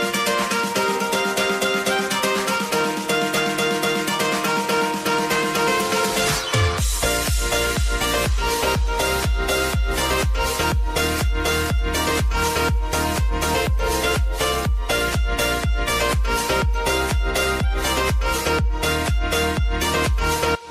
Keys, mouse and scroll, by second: 0.6 click, 3.4 space, 5.4 click, 7.0 Page_Down, 8.8 ctrl+a, 9.4 alt+], 10.6 right click, 11.8-16.9 drag, 16.9 right click, 17.9 click.